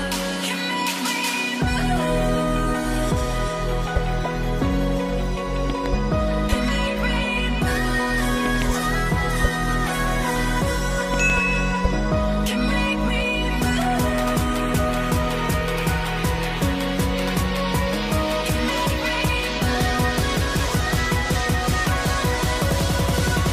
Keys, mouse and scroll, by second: 3.1 ctrl+click, 3.2 ctrl+double click, 5.9 ctrl+double click, 7.3 ctrl+ت, 15.4 ctrl+a, 16.5 ctrl+click, 21.8 Return, 22.4 typing.